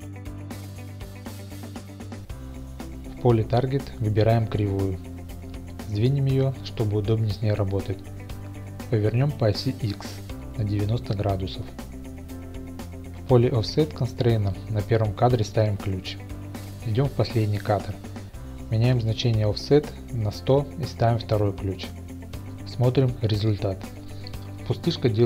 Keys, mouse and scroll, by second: 2.2-3.2 drag, 6.3 click, 8.1 g, 8.5 y, 9.3 click, 11.9 r, 12.1 x, 12.3 KP_9, 12.4 KP_0, 12.7 Return, 13.9 click, 14.6 right click, 15.3 click, 16.5-17.6 drag, 16.9 KP_0, 17.7 right click, 21.1 space, 21.6-21.9 middle drag, 22.5-23.0 shift+middle drag.